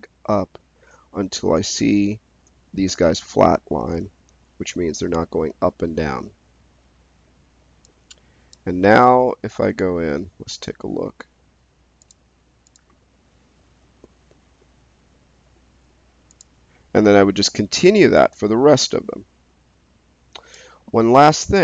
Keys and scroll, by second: 9.4 space.